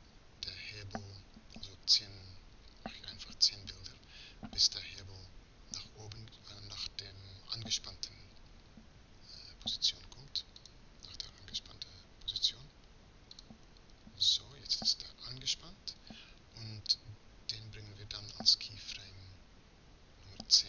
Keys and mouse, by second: 0.1-15.3 drag.